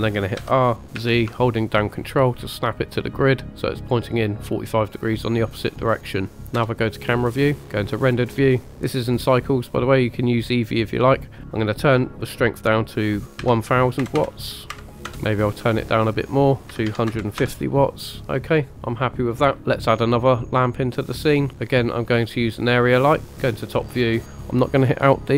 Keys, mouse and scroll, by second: 0.4 r, 1.0 z, 3.5 ctrl+click, 6.6 KP_0, 7.9 click, 11.4-15.1 drag, 14.1 KP_0, 16.0-17.4 drag, 19.6-20.5 scroll up 2, 21.5 click, 22.5 click, 23.3 KP_7.